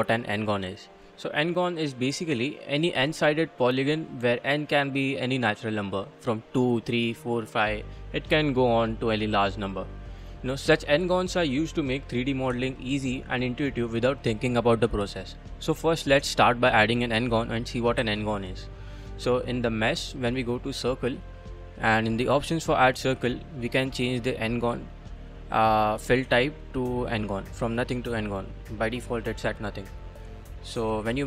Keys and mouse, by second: 10.1-10.7 drag, 10.7 middle click, 11.4-12.0 middle drag, 18.0 shift+a, 24.0 click, 25.9 click, 27.0-28.3 drag, 30.1-31.2 drag.